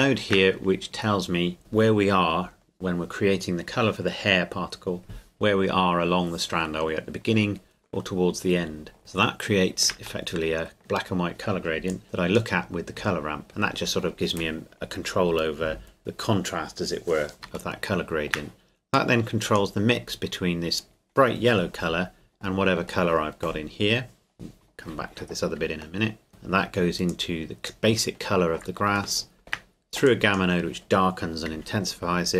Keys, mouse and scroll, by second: 0.6-1.6 scroll up 1, 1.6 click, 9.0 shift+middle click, 10.3 shift+middle click, 11.9 click, 17.4 click, 17.7 shift+middle click, 18.9 click, 25.6 click, 26.0 shift+middle click, 26.1 shift+middle click, 26.3-27.1 scroll down 1, 27.1 click, 29.1 shift+middle click, 30.1 click.